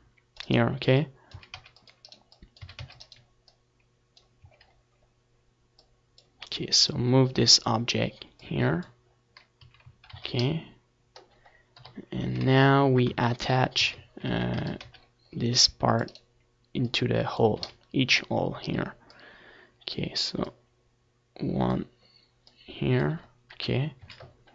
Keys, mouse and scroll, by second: 3.0 z, 3.4 middle click, 3.6 z, 5.2 KP_7, 6.6 Tab, 7.4 a, 7.9 a, 8.2 a, 8.5 c, 9.9-12.1 right drag, 10.6-12.6 drag, 11.4-13.7 middle drag, 11.4 z, 12.9-15.9 drag, 16.4-18.1 drag, 17.5 KP_7, 17.9 z, 18.3-20.6 middle drag, 18.6 a, 18.9 c, 20.6-22.3 right drag, 21.2-22.3 drag, 22.5 click, 22.7 z.